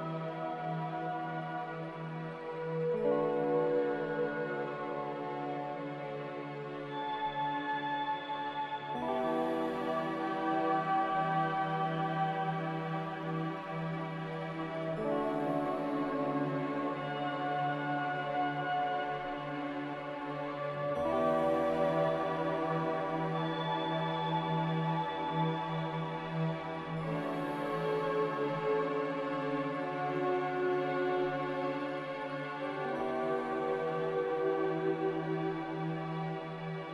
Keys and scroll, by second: 6.3 b, 7.9 a, 9.2 b, 11.4 g, 18.2 ctrl+z, 27.6 g, 30.2 z, 32.5-33.3 typing.